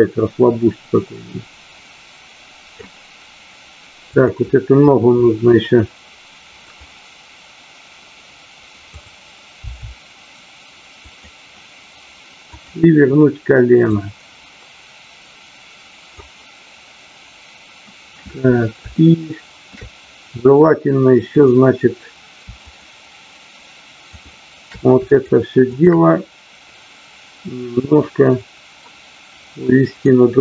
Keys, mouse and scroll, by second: 4.1 click, 6.6 click, 8.8 click, 9.5 r, 11.0 click, 13.9-16.2 drag, 18.9 shift+middle click, 21.3 click, 22.6 shift+click, 24.2 shift+drag, 24.9-25.8 shift+drag, 27.5-30.1 drag.